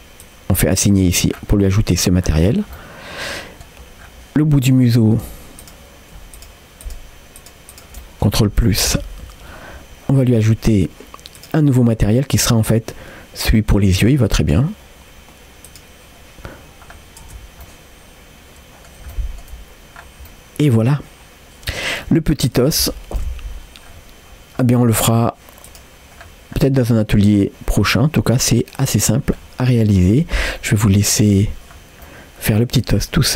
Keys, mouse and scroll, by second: 0.2 click, 1.3 scroll up 2, 2.2-2.8 scroll down 3, 2.8 middle click, 4.0-4.4 scroll up 2, 4.4 middle click, 5.0 shift+middle click, 5.6 click, 6.4-7.5 shift+drag, 8.0 middle click, 8.9 ctrl+KP_Add, 11.4 click, 12.3-14.6 drag, 16.9 scroll down 1, 17.3 Tab, 17.7-18.9 middle drag, 19.1 shift+scroll up 1, 19.1 shift+middle click, 20.0 scroll down 2, 20.3-22.0 middle drag, 22.5-23.2 scroll down 1, 23.2 KP_1, 23.9 scroll up 2, 24.5-25.1 scroll down 1, 25.1 scroll down 1, 25.7 click, 26.2-26.6 scroll down 1, 26.6-29.2 middle drag, 29.4 scroll up 2, 29.7-31.1 middle drag, 31.4-31.8 scroll down 2, 32.1-33.3 middle drag, 32.1-32.5 scroll down 2.